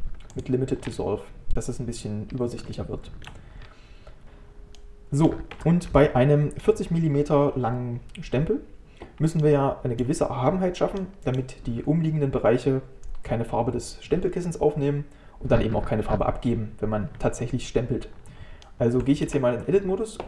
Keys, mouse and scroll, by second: 0.9 scroll up 1, 2.3 scroll down 2, 2.8 shift+middle click, 3.6-4.2 scroll up 1, 4.2-4.8 scroll down 1, 4.8 middle click, 5.6 Tab, 9.4-14.2 middle drag, 18.7 middle click, 19.3 Tab.